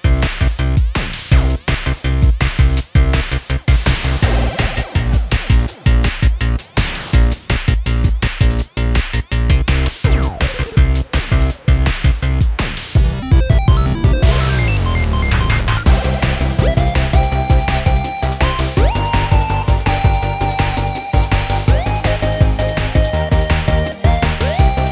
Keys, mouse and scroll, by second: 4.3-4.8 scroll up 2, 5.8-6.2 scroll up 1, 6.2 scroll down 3, 6.9-8.4 middle drag, 8.4-8.9 scroll down 2, 8.9-11.0 middle drag, 11.0-11.5 scroll up 2, 11.5-13.6 middle drag, 13.6-14.1 scroll down 1, 14.1-14.6 scroll up 2, 14.6-15.7 middle drag, 15.7-17.5 scroll up 1, 17.5-19.0 middle drag, 19.0 k.